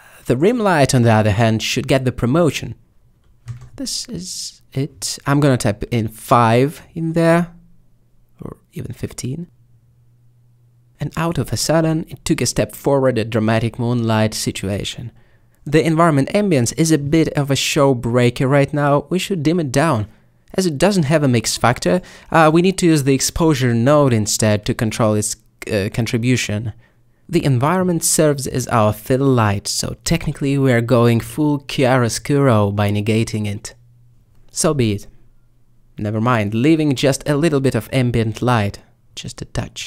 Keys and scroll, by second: 5.5 typing, 8.2 typing, 19.5 a, 24.1 g, 36.8 typing, 37.0 Return, 38.9-39.6 typing.